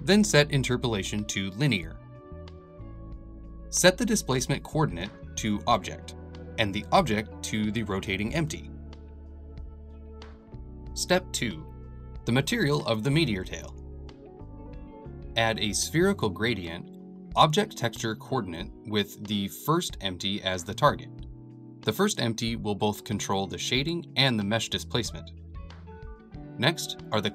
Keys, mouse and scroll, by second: 1.1-5.3 middle drag, 5.3 click, 6.6 g, 9.7 click, 10.4 click, 15.2-18.4 drag, 18.4-19.7 middle drag, 19.7 click, 20.2-23.0 shift+middle drag, 23.0-27.3 drag.